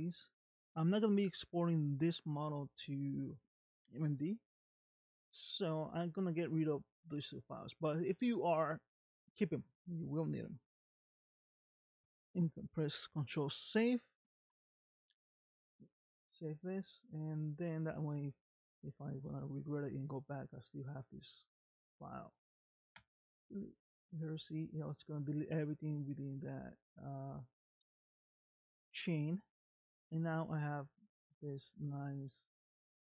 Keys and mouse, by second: 10.4 middle click, 13.5 ctrl+s, 15.9 middle click, 17.5-23.4 right drag, 24.5-28.4 right drag, 30.0 click.